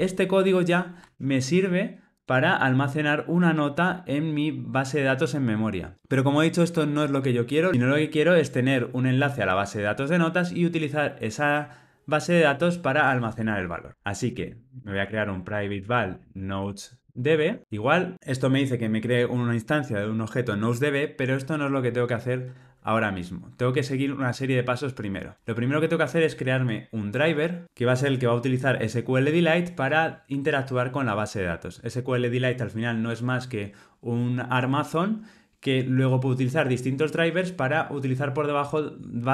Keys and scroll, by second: 1.1 alt+super+l, 15.4 Return.